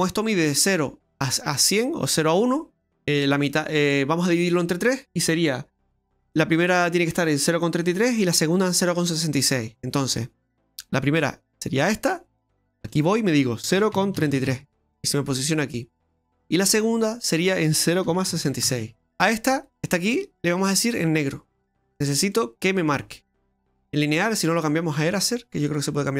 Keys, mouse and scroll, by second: 11.8 click, 12.9 click, 14.3 KP_3, 16.2 click, 17.2 click, 18.4 KP_6, 19.5 click, 20.6 click, 25.1 click.